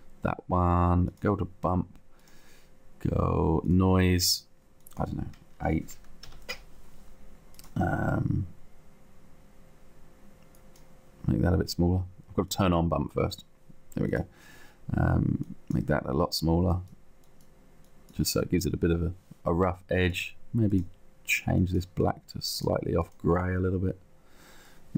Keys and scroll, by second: 5.7 8, 6.1 Return, 7.9 Return.